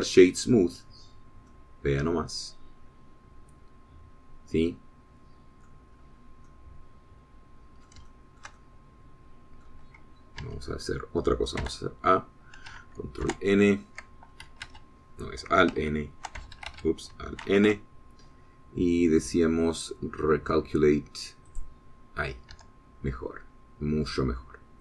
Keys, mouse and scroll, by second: 1.5 right click, 2.4 scroll down 1, 2.7-7.1 middle drag, 7.2 scroll up 1, 7.7-9.3 middle drag, 9.3-11.1 shift+middle drag, 11.8 Tab, 12.9 a, 14.5 ctrl+n, 15.9 Escape, 17.0 alt+b, 17.8 alt+Escape, 18.7 alt+n, 22.7 click, 23.8 Tab, 24.4-24.8 drag.